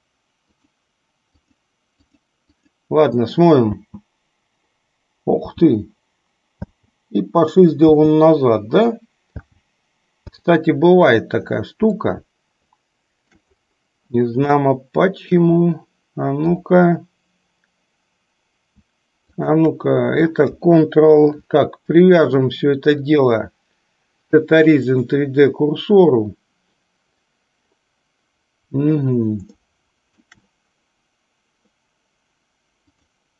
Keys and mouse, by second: 2.3 click, 3.7 space, 5.7 space, 8.1 space, 9.5 space, 12.2-13.6 shift+middle drag, 14.8-15.8 shift+middle drag, 23.2-25.5 drag, 29.8-30.4 shift+middle drag.